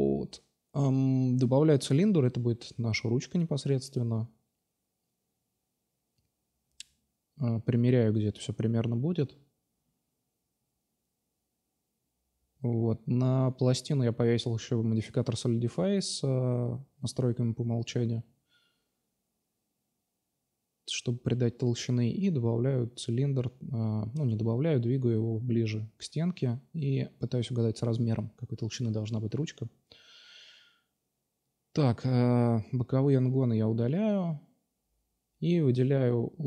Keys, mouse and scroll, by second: 2.0 r, 3.4 s, 4.7 s, 6.6-7.1 right drag, 7.4-8.6 drag, 8.8 middle drag, 9.4 Tab, 10.2 a, 10.3 a, 12.1-13.1 drag, 13.4 Tab, 14.5 Tab, 14.9-15.7 drag, 15.0 Tab, 15.6 a, 15.7 a, 16.1-16.9 drag, 16.7 s, 17.6 s, 18.4-20.3 drag, 20.1 s, 20.6-21.0 drag, 21.0 s, 22.0-22.9 drag, 23.5 drag, 23.8-25.1 middle drag, 25.1 s, 25.8 middle drag, 26.1 s, 26.8 middle drag, 29.3 middle click, 30.2 3, 31.5 x, 32.8 middle click, 33.0 Tab, 33.4-34.1 drag, 33.5 Tab, 34.4 2, 34.6-35.4 drag, 35.8 click, 36.2-36.4 drag.